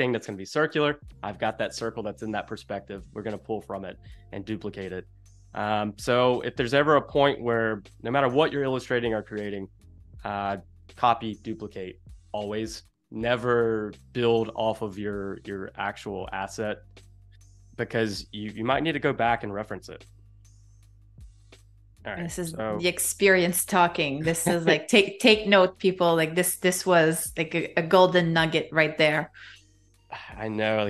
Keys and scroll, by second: 16.0 space, 17.4 space, 19.4 v, 20.1 space, 22.2 super+=, 22.7 space, 23.9 space, 27.8 a, 29.9 space.